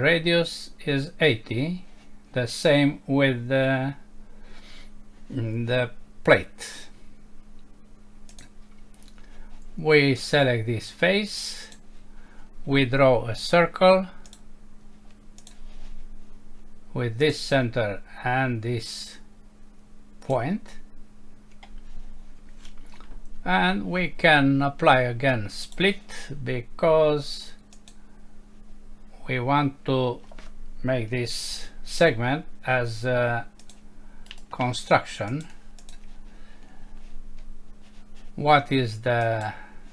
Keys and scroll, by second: 31.4 Escape.